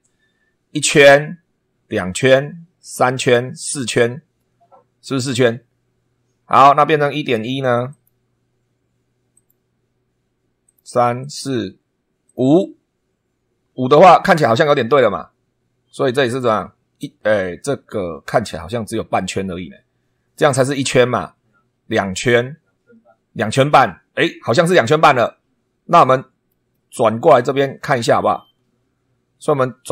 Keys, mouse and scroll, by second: 7.9 click, 9.3 click, 10.6 click, 11.2 click, 12.2 click, 26.0 middle click, 26.8 middle click, 27.8 scroll down 1, 29.8 click.